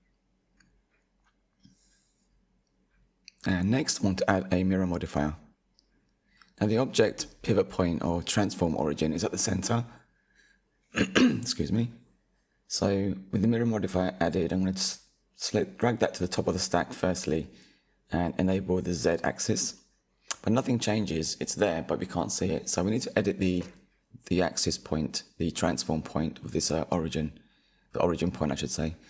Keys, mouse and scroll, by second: 0.7 click, 1.2-3.4 shift+middle drag, 3.4 KP_1, 6.9-8.2 shift+middle drag, 8.2-11.2 drag, 12.6-13.7 drag, 14.9 click, 15.8 click, 18.7-20.2 middle drag, 20.2 KP_1, 23.7-26.7 drag.